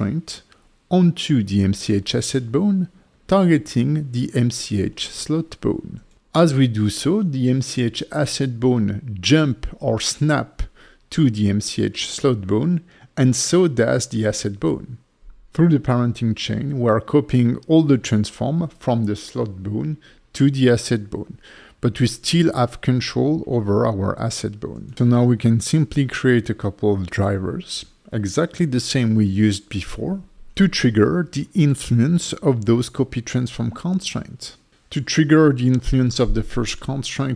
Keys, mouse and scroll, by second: 1.3 click, 2.3 click, 2.5 click, 3.5 alt+shift+right click, 5.9 ctrl+shift+c, 7.9 click, 8.5 middle click, 10.2 click, 10.7 middle click, 11.5 click, 11.9 g, 12.4 right click, 12.9 click, 13.2 click, 13.8 g, 14.5 right click, 15.1 click, 16.0 click, 16.2 click, 17.7 click, 24.8 click, 24.8 scroll down 1, 25.1 click, 26.9 right click, 31.5 scroll up 2, 32.1 click, 32.5 click, 34.2 right click, 35.7 right click.